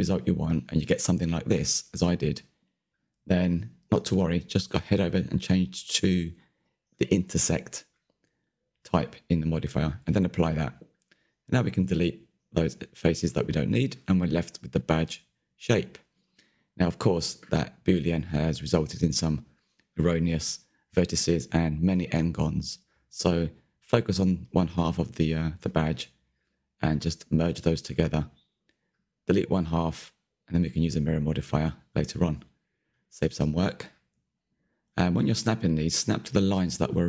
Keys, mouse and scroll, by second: 2.1-5.5 middle drag, 5.5-6.5 drag, 6.5-7.2 middle drag, 7.2 scroll up 3, 7.5-8.2 middle drag, 8.2 click, 8.6-9.0 middle drag, 9.0 scroll down 1, 9.1 middle click, 9.4-9.9 scroll up 1, 9.9 click, 10.6 Delete, 10.8 middle drag, 11.1 click, 11.1 Tab, 11.4 middle click, 12.2 Delete, 12.3 middle click, 12.6 Tab, 12.7 middle click, 13.0 Tab, 13.1-13.8 scroll up 3, 13.8 1, 14.0 shift+middle click, 14.5 click, 16.4 m, 16.6 click, 17.1 m, 17.2 shift+middle click, 17.3 scroll up 2, 17.5 shift+middle click, 17.7 click, 17.9 shift+click, 18.1-18.8 scroll down 1, 18.8 m, 19.4 ctrl+z, 19.5 click, 19.7 click, 19.8 shift+click, 20.1 m, 20.3 click, 21.0 middle click, 21.2 scroll down 2, 21.3 shift+middle click, 21.7 scroll up 3, 21.9 shift+middle click, 22.3 click, 23.0-25.6 typing, 23.1 click, 23.6 shift+middle click, 23.8 click, 24.3 click, 25.0 shift+middle click, 25.1 scroll up 1, 25.3 click, 25.9 scroll down 1, 26.0 shift+middle click, 26.5 scroll down 1, 26.6 shift+middle click, 27.5 ctrl+KP_3, 28.0 Left, 28.8 Left, 29.4 Left, 29.5 Left, 30.3 Delete, 30.7 Tab, 30.9 Tab, 31.0 scroll up 2, 31.3 shift+middle click, 31.7-32.0 scroll up 4, 32.0 click, 32.6 m, 33.0 click, 34.0 m, 34.1 shift+middle click, 34.3 click, 34.6 m, 34.7 shift+middle click, 34.9 click, 35.3 m, 35.4 scroll down 1, 35.5 shift+middle click, 36.3 scroll up 3, 36.6 click, 36.9 m, 37.0 scroll down 2.